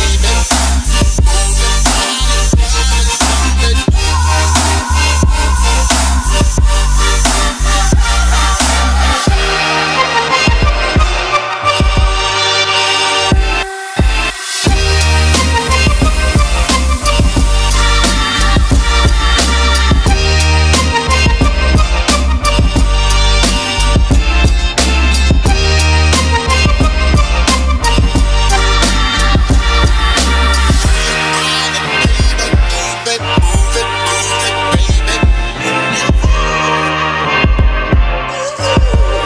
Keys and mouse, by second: 1.7 ctrl+click, 2.0 ctrl+z, 2.8 ctrl+r, 4.4-5.5 ctrl+z, 6.7 click, 7.0-7.4 middle drag, 8.3 Tab, 8.9 middle click, 10.5 middle click, 11.5 shift+middle click, 11.8 ctrl+middle click, 12.8 alt+click, 13.1 shift+middle click, 13.4 ctrl+middle click, 15.3 shift+click, 15.9 shift+click, 17.0 middle click, 17.4 ctrl+b, 19.4 right click, 19.8 middle click, 21.7 ctrl+middle click, 22.4 middle click, 24.6 ctrl+r, 26.7 click, 27.2 ctrl+z, 27.6 middle click, 30.4 3, 30.7 middle click, 32.1 shift+click, 32.4 shift+click, 32.6 middle click, 33.5 middle click, 34.2 shift+click, 34.4 middle click, 35.4 shift+click, 36.4 middle click, 37.6 middle click, 38.4 shift+click.